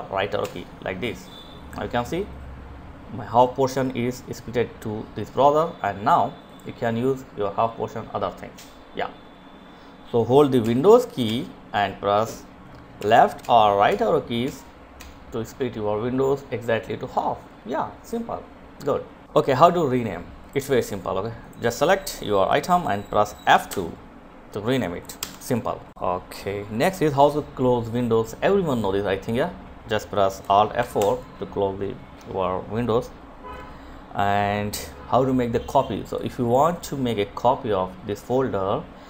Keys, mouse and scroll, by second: 4.9 click, 9.0 super+Right, 9.7 Left, 11.4 Left, 11.7 Right, 12.3 Right, 12.8 Right, 13.3 Right, 16.4 click, 21.9 F2, 23.5 Escape, 27.0 click, 29.1 F4, 34.4 click.